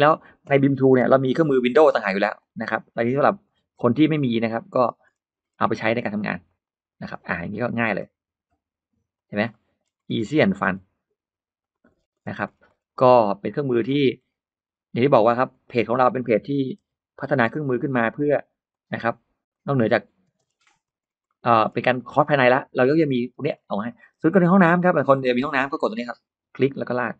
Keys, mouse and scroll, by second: 0.9 p, 1.3 click, 1.5 click, 2.2 click, 2.4 click, 2.8 middle click, 2.9 space, 3.1 space, 3.2 Escape, 3.5 scroll up 1, 3.6 middle click, 3.7-4.1 scroll down 1, 4.4 scroll up 2, 4.6-5.2 scroll down 4, 5.3-5.6 scroll up 2, 6.1 click, 6.5 click, 6.6 click, 7.2 middle click, 8.1 r, 9.0 click, 9.3-9.6 scroll up 1, 9.4 middle click, 9.7-10.0 scroll down 1, 10.0-10.3 scroll up 2, 10.3 middle click, 10.4-10.8 scroll down 2, 11.4 click, 11.7 scroll down 2, 12.3 middle click, 13.7 click, 14.0 middle click, 15.3 click, 15.8 middle click, 17.1 click, 17.3 click, 17.6 middle click, 18.0 middle click, 18.0-18.4 scroll up 1, 18.7 click, 19.4 click, 19.5 click, 20.1 space, 20.2 middle click, 20.3 Escape, 20.3 space, 20.4-20.9 scroll down 2, 20.7 Escape, 21.0 scroll up 1, 21.1 middle click, 21.2-21.6 scroll down 1, 21.8 middle click, 22.4-22.7 scroll up 1, 22.7 middle click, 23.1 scroll down 1, 23.4-24.0 scroll up 1, 25.0 click, 25.4-25.8 scroll up 1, 26.4 click.